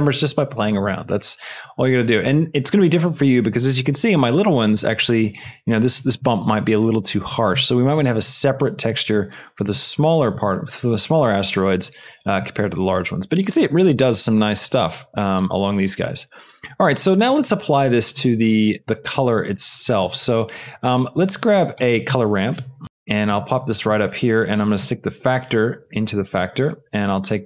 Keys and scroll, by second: 21.6 shift+a, 22.5 c, 22.8 Return, 22.8 Down.